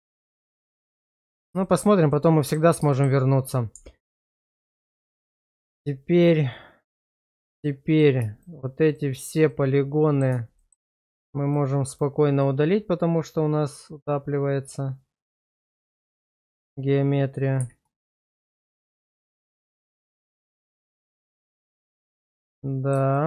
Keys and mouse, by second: 1.7 shift+middle click, 2.1 middle click, 2.9 shift+middle click, 3.4 click, 3.7 Tab, 4.7 Tab, 7.0 middle click, 7.4 shift+middle click, 7.9 click, 9.5 middle click, 10.6 shift+middle click, 12.4-16.2 middle drag, 17.6 x, 19.5 shift+middle click, 19.7 middle click, 21.2 Tab, 21.8 shift+middle click, 22.2 middle click, 23.1 middle click.